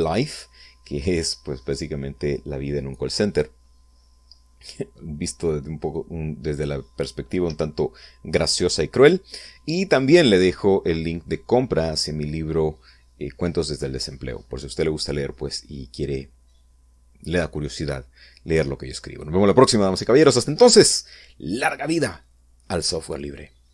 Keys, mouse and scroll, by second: 22.1-22.6 scroll down 1, 22.7 middle click.